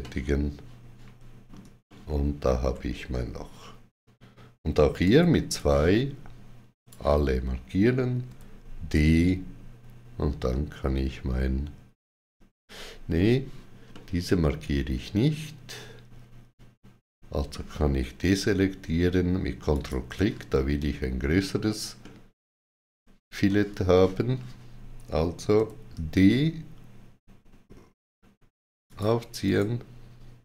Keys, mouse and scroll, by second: 1.7 shift+middle click, 4.9 2, 5.4 click, 8.1 d, 13.8 middle click, 19.5 ctrl+click, 21.8 middle click, 23.8 shift+middle click, 25.4 d, 28.7 shift+click, 29.3 right click.